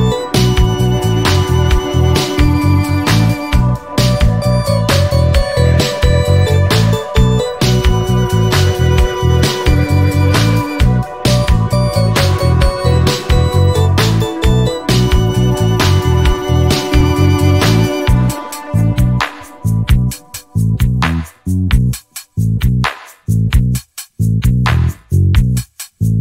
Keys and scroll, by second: 0.6 i, 1.7 shift+Left, 2.4 alt+a, 7.6 Escape, 8.1 alt+a, 9.9 Escape, 10.3 alt+a, 10.9 Escape, 11.4 alt+a, 14.5 Escape.